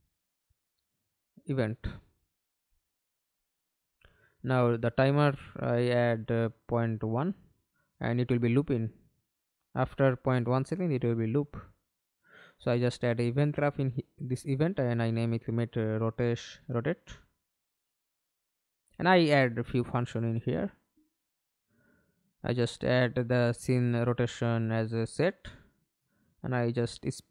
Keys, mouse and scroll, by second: 1.0 r, 1.2 space, 1.4 b, 2.2 Up, 2.4 Return, 6.0 Right, 7.4 1, 7.6 1, 8.1 BackSpace, 8.4 Return, 10.0 right click, 12.4-13.2 typing, 13.2 Return, 14.9-17.8 typing, 20.0 right click, 21.4 right click, 23.1 double click, 26.9 right click.